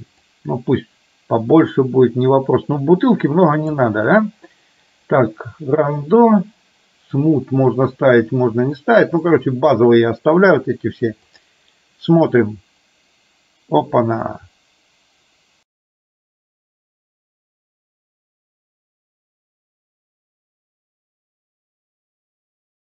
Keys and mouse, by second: 7.3 click, 11.0-22.8 drag.